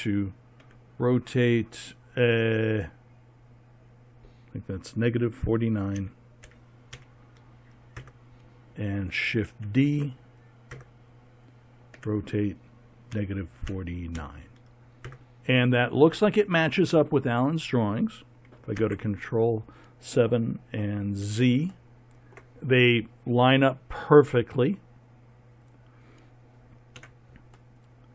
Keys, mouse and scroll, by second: 0.6 r, 4.1 r, 9.6 shift+d, 12.0 r, 18.8 ctrl+KP_7, 20.9 z, 27.0 z.